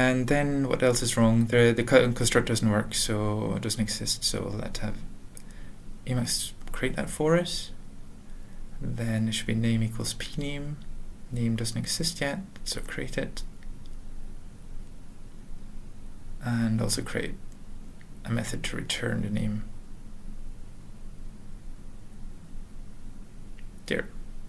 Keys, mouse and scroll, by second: 0.8 alt+f, 1.3 alt+b, 1.9 alt+Return, 2.2-3.1 typing, 3.9 alt+f, 4.7 alt+b, 4.7 alt+., 6.3 ctrl+e, 6.8 Return, 7.5 alt+b, 8.0 alt+c, 8.0-11.4 typing, 8.8 ctrl+n, 11.7 alt+b, 12.0 alt+b, 12.8 alt+b, 12.8 alt+Return, 13.0-13.8 typing, 14.2 ctrl+n, 14.5 Return, 16.1 ctrl+n, 16.6 Return, 17.1-22.6 typing, 22.2 Return, 22.7 ctrl+a, 23.1 ctrl+s, 23.3 alt+,.